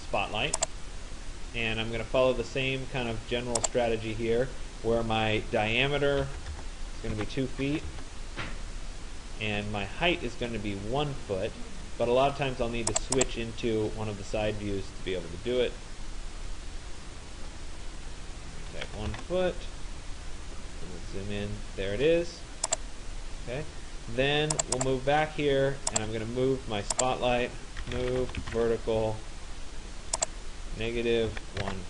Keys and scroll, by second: 6.0 Return, 7.1 2, 8.0 Return, 18.6 Return, 27.8 Return, 31.3 -, 31.6 1.